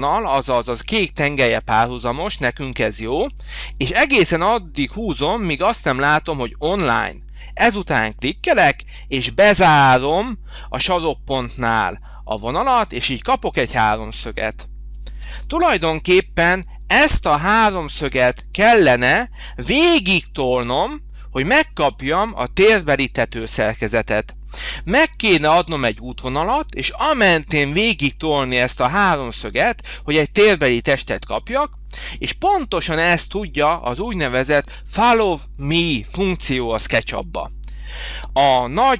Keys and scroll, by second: 15.2 space, 18.9 Delete.